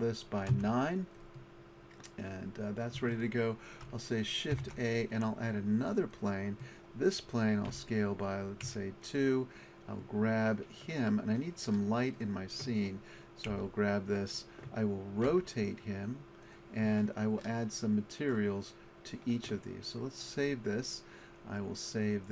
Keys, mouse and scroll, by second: 4.5 shift+a, 7.7 s, 9.0-9.5 drag, 11.8-12.7 middle drag, 13.5 g, 15.3 r, 17.8 middle click, 18.1 middle click, 20.1-21.2 middle drag.